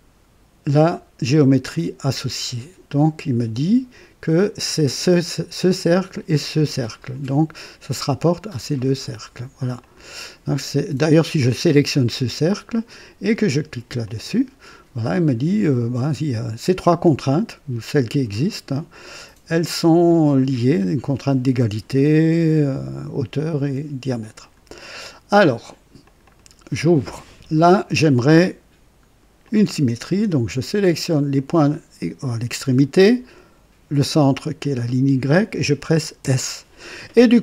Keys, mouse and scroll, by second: 1.6 click, 9.7 click, 11.4 click, 14.0 click, 24.3 click, 26.0 click, 27.0 right click, 29.4 click, 31.3 click, 34.5 click, 36.2 s.